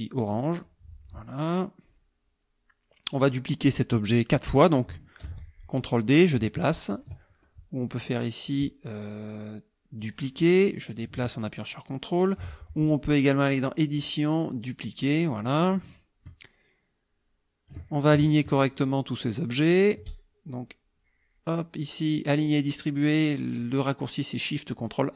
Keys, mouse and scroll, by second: 0.5 click, 1.7-3.4 drag, 5.3 ctrl+d, 6.1-7.2 drag, 10.0 click, 10.7-12.5 drag, 13.7 click, 14.7 click, 15.7-17.9 ctrl+drag, 18.5 shift+click, 19.2 shift+click, 19.7 shift+click, 24.9 click.